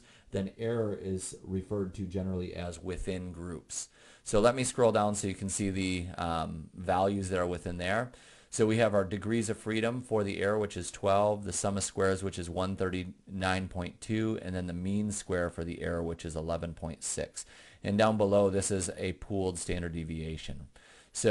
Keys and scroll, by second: 5.1 Down, 5.8 Down, 6.4 Down.